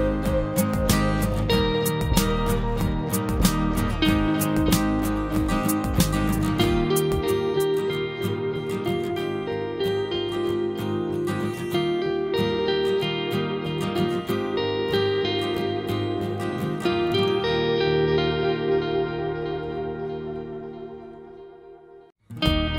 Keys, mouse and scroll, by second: 3.3 scroll down 1, 3.4 click, 4.2 scroll down 1, 6.7 scroll up 1, 6.7 typing, 8.1 click, 8.7 scroll down 1, 9.8 scroll up 1, 12.9 click, 13.7 scroll down 1, 14.6 scroll up 1, 15.5-15.8 typing, 16.6 click, 17.5 scroll down 1, 17.6 typing, 18.8 scroll up 1, 19.8-20.3 typing, 22.4 click, 22.4 typing, 22.5 click.